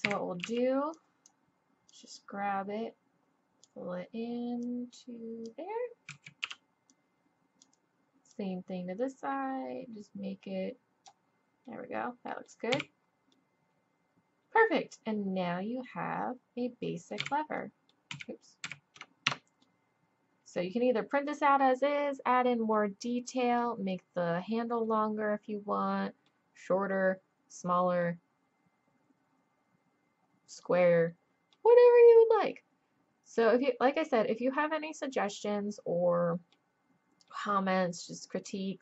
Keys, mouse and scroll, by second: 0.1 a, 0.4 b, 1.9-3.8 drag, 4.6-6.4 drag, 6.1 a, 6.4 b, 8.3-9.5 drag, 11.7 middle click, 12.3-13.6 middle drag, 12.7 z, 13.6-15.6 drag, 17.2 z, 17.6-18.7 scroll up 1, 18.1 z, 18.7 a, 19.3 Tab, 22.3-23.2 middle drag, 23.2-30.5 drag, 31.9-33.6 middle drag, 37.4-38.3 middle drag, 38.3 click.